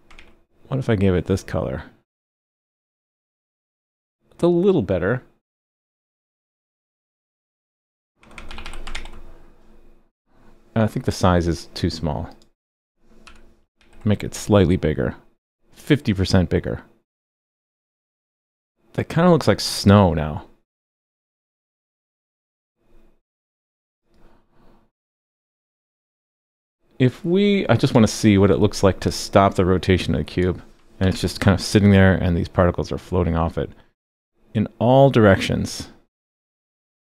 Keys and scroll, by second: 0.1 super+s, 8.9 super+s, 13.8 super+s, 31.0 super+/, 31.1 super+s.